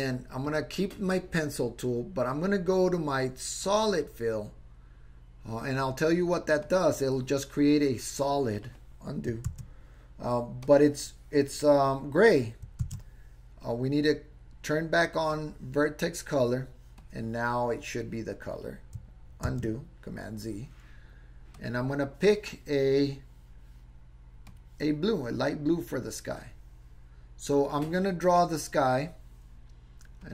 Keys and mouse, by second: 0.5 click, 2.5-5.8 drag, 6.6 click, 9.6 super+z, 10.6 click, 12.9 super+z, 15.4 click, 17.0 click, 19.6 super+z, 21.6 click, 30.2-30.3 drag.